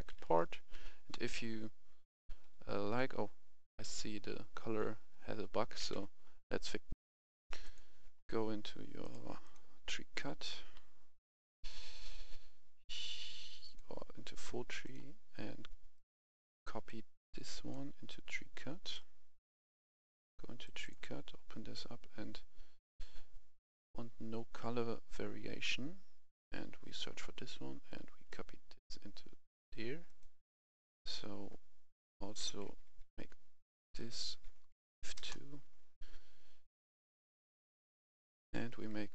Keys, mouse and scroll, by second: 0.0-0.9 typing, 1.9-3.3 typing, 5.0-5.7 typing, 5.9 Escape, 6.9 F11, 7.0 F10, 7.6 click, 10.7-11.5 scroll down 1, 11.5-11.8 scroll up 1, 12.8-13.2 scroll down 1, 13.7-15.8 drag, 15.9 right click, 16.5-24.8 drag, 28.3 click, 32.7 F1, 33.1 F2, 33.8 click, 34.1 F2, 34.9 Right, 35.0 2, 35.2 Return, 36.8 F11, 36.9 F10, 37.9 click, 38.4 F2.